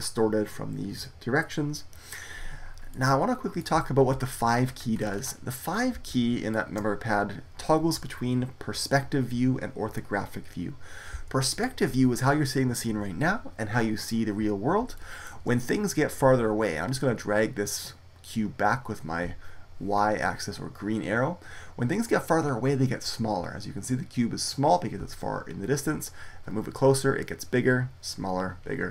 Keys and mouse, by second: 2.8 middle click, 12.4-14.9 middle drag, 17.6-19.4 drag, 19.4-26.4 middle drag, 28.8 middle click.